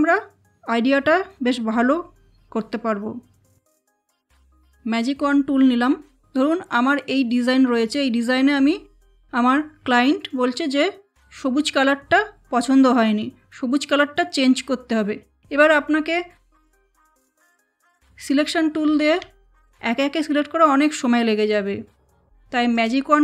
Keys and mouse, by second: 3.9 click, 17.3 v, 19.4 shift+click, 22.7 click.